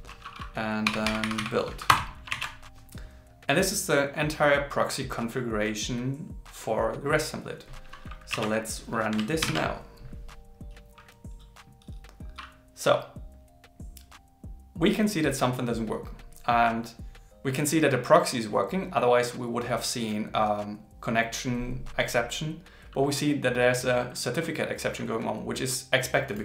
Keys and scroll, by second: 2.3 super+s, 9.4 ctrl+shift+r.